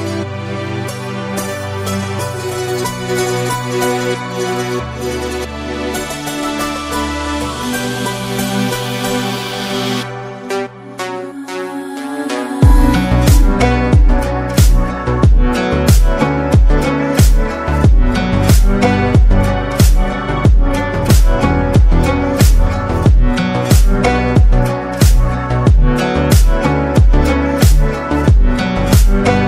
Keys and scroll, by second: 12.5 ctrl++, 12.7 ctrl++, 16.4 Down, 16.6 Down, 17.0 Down, 19.8 ctrl+-, 19.9 ctrl+-, 20.1 ctrl+-, 26.4 ctrl++, 26.6 ctrl++.